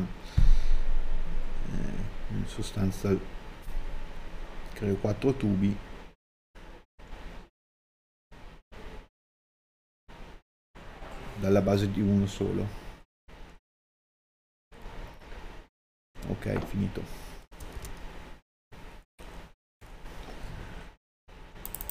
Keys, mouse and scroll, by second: 10.2 click, 14.1 middle click, 14.9 scroll down 1, 16.0 click.